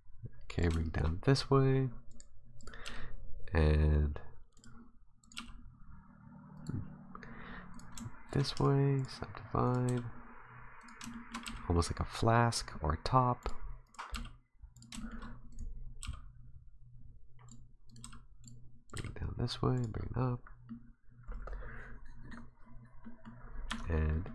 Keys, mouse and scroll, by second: 0.8 shift+middle click, 2.1 right click, 2.6 right click, 2.8 g, 5.2 right click, 5.4 g, 7.7 right click, 8.3 shift+right click, 8.6 w, 9.6 right click, 9.9 g, 11.1 shift+middle click, 11.4 g, 13.9 right click, 14.1 g, 15.0 shift+middle click, 15.5 right click, 16.0 g, 17.9 right click, 18.0 g, 18.9 right click, 19.0 g, 19.9-20.6 scroll down 5, 20.4 scroll up 3, 20.7 middle click, 22.5 scroll down 2, 23.0 middle click, 23.4-23.7 scroll up 3, 23.7 Tab, 24.1 middle click.